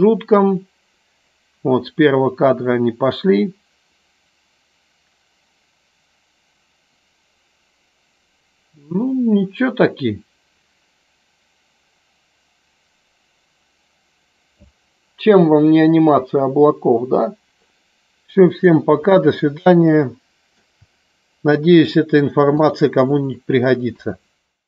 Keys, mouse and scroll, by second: 17.7-20.7 middle drag, 22.0 click, 22.5 click.